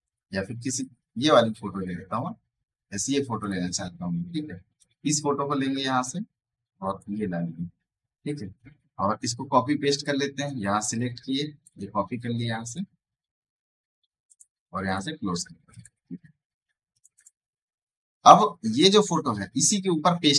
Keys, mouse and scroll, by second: 9.8-12.5 drag, 16.6 space, 16.8 right click, 17.1 click, 18.1 v.